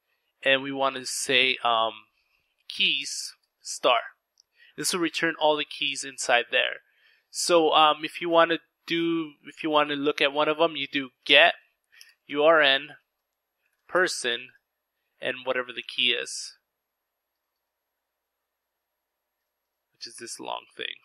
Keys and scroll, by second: 1.0-2.1 typing, 2.3 Return, 9.2-13.3 typing.